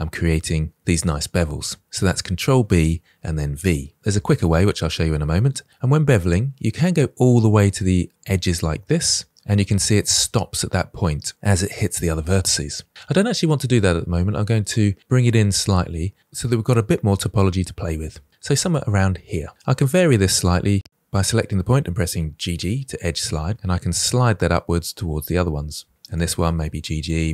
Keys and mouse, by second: 19.6-20.7 middle drag, 21.5 click, 22.4 g, 22.5 g, 23.5 g, 25.8 click, 26.2 g, 26.3 g, 26.8 middle click.